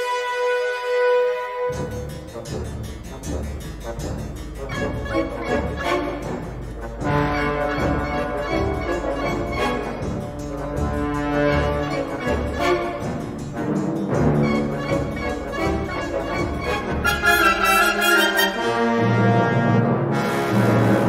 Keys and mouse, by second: 0.5 e, 3.5 b, 7.5 middle click, 8.6 middle click, 9.4 b, 11.7 click, 13.9 s, 14.5 g, 17.0 click, 17.6-19.2 middle drag, 20.2 middle click, 20.9 middle click.